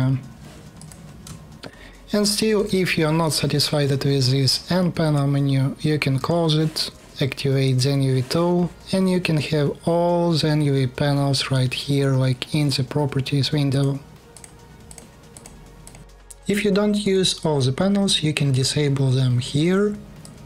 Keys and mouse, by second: 0.5 click, 1.5 shift+u, 2.2 n, 5.9 n, 7.4-20.4 drag.